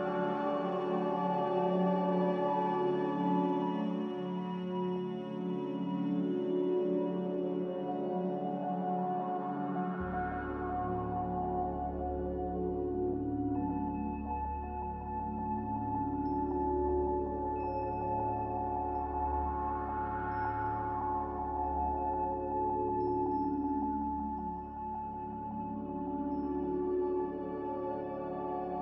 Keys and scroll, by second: 0.0-0.7 typing, 5.2-6.0 typing, 11.2-12.4 typing, 16.1-16.9 typing, 26.1-27.0 typing.